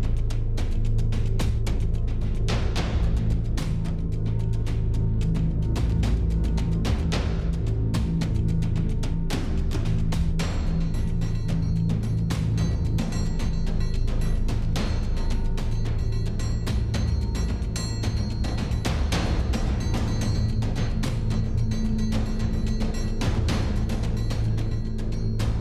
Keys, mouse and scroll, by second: 1.6 middle click, 2.3 middle click, 4.1-5.3 drag, 5.6 middle click, 6.1 middle click, 6.7 click, 6.9-8.0 drag, 8.6 Tab, 11.5 Tab, 13.2 a, 13.2 click, 13.5 click, 14.5 s, 15.9 s, 18.9-19.8 drag, 18.9 s, 21.1 middle click, 21.6 click, 21.7 middle click, 22.2-23.3 middle drag, 24.1 click, 24.5 click, 25.3 click.